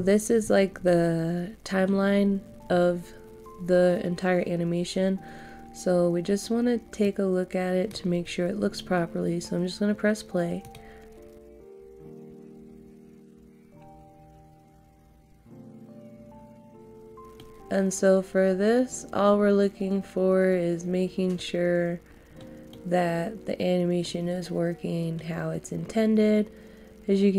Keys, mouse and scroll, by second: 7.0 click, 13.9 scroll down 1, 17.3-18.8 middle drag, 22.8 middle click.